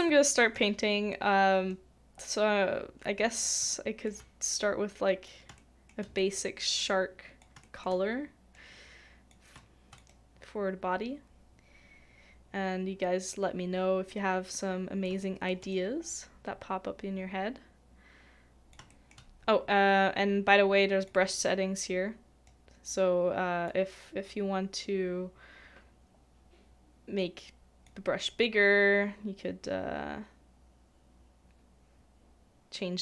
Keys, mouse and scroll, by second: 0.0 middle click, 3.7 shift+middle click, 5.6 shift+middle click, 6.2 shift+middle click, 7.6 shift+middle click, 9.6 shift+click, 15.2 shift+middle click, 18.9 shift+middle click.